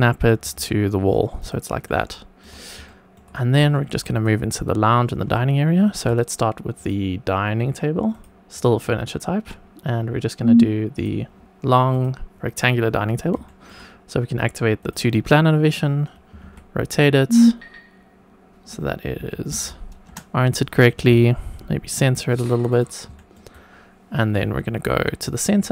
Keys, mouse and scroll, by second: 0.1 click, 0.4 g, 1.3 click, 1.8-2.4 shift+middle drag, 2.8 shift+middle click, 3.7 shift+middle click, 4.1 click, 5.3 shift+right click, 6.7-8.1 drag, 8.5-11.0 drag, 11.8 click, 13.4 shift+middle click, 14.8 click, 16.3 r, 16.4 z, 19.1 KP_Subtract, 19.4 KP_9, 20.0 Return, 20.0 KP_0, 20.9 g, 22.7 click, 23.1 shift+middle click, 23.5 shift+right click.